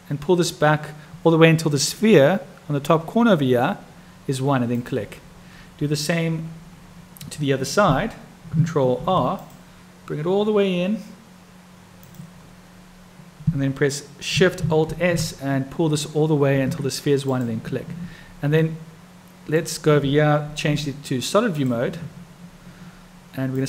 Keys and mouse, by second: 8.9 ctrl+r, 14.9 alt+shift+s, 18.6-19.6 drag, 21.5 click.